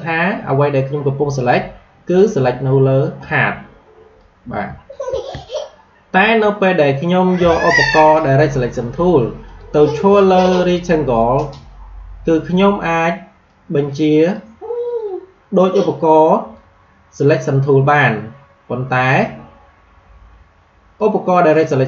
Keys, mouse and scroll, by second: 3.3-5.0 drag, 5.0 ctrl+z, 6.1 click, 9.4 click, 13.4-19.1 drag, 20.9-21.8 drag.